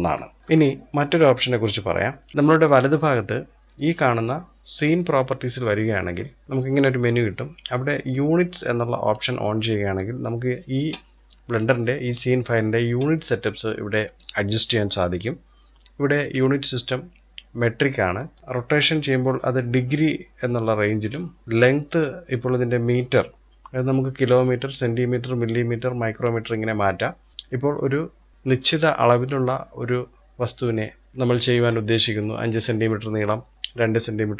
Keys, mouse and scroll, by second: 0.4-2.3 shift+middle drag, 8.0-10.6 drag, 10.6-11.6 scroll down 1, 17.6-20.5 drag, 21.4-24.4 drag.